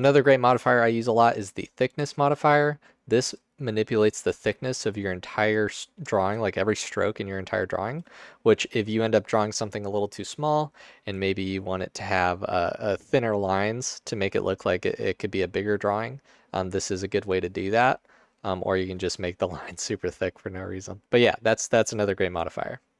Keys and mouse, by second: 1.0-1.4 drag, 17.0-18.8 drag.